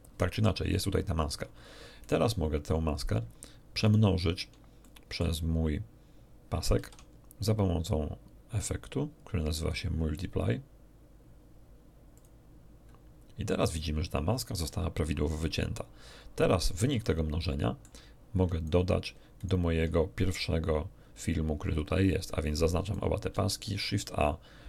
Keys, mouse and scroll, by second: 2.0 right click, 3.8 shift+right click, 4.8 shift+middle click, 6.8 shift+a, 12.1 click, 17.0-18.0 ctrl+middle drag, 18.3 ctrl+right click, 19.4 ctrl+shift+right click, 20.3-22.2 shift+drag, 22.8 shift+middle click, 23.3 shift+a.